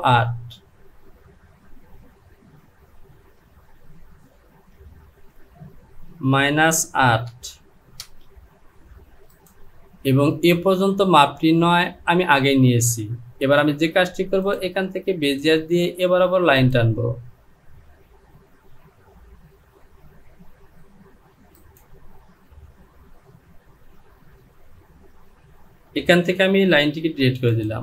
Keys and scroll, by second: 6.1 KP_Subtract, 7.2 KP_8, 8.0 Return, 27.3 Delete.